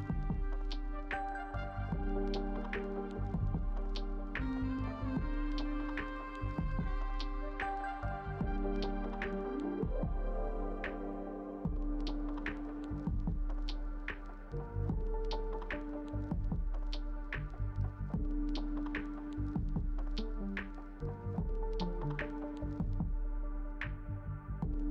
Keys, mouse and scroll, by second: 0.7 space, 7.1 double click, 21.8 ctrl+0.